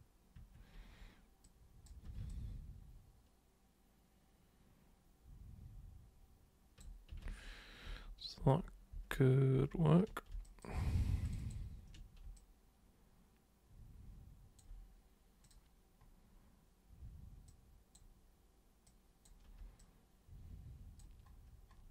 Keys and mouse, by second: 0.4 super+1, 1.5 super+click, 2.3-6.8 alt+super+drag, 7.3 ctrl+super+z, 7.9 ctrl+super+z, 8.4 ctrl+super+z, 9.0 ctrl+super+z, 9.5 ctrl+super+z, 10.5 alt+super+click, 11.2 ctrl+shift+super+click, 12.3-14.6 alt+super+drag, 15.4 super+click, 17.5 super+click, 18.8 super+click, 19.8-21.0 alt+super+drag.